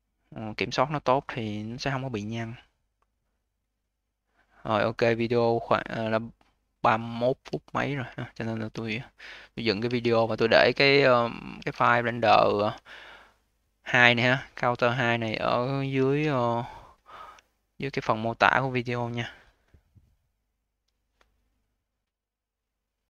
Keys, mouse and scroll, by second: 0.4-1.8 alt+drag, 1.8 alt+middle click, 2.1-5.3 alt+drag, 7.1-7.5 scroll down 1, 7.5-8.2 alt+middle drag, 8.2-8.6 scroll down 1, 8.6 a, 9.7 q, 10.2 click, 11.1 click, 11.4 q, 11.9 click, 12.3-15.4 alt+middle drag, 15.9 ctrl+s, 17.4-20.4 alt+middle drag.